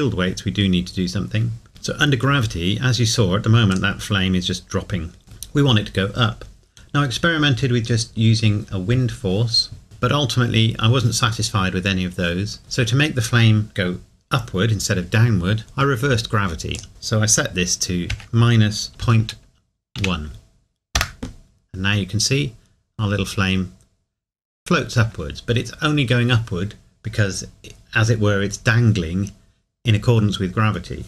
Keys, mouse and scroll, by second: 0.2-0.7 scroll down 1, 3.7 click, 9.8 click, 15.6 scroll down 1, 18.1 KP_Subtract, 21.4 KP_Enter.